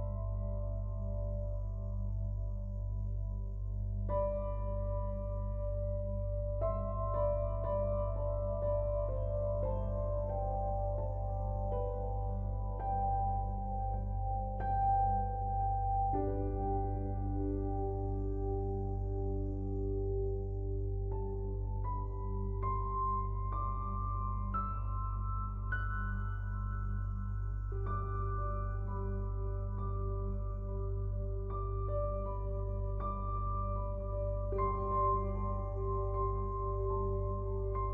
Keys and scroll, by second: 21.2 ctrl+l, 34.7 ctrl+l.